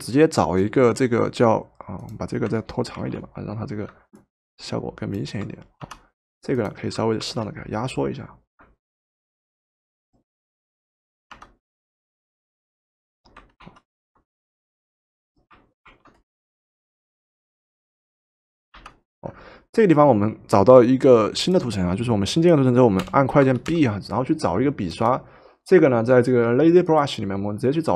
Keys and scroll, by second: 3.0 ctrl+t, 5.8 Return, 7.3 ctrl+t, 11.3 Return, 13.6 ctrl+z, 15.9 ctrl+t, 18.8 Return, 23.0 b, 23.8 b.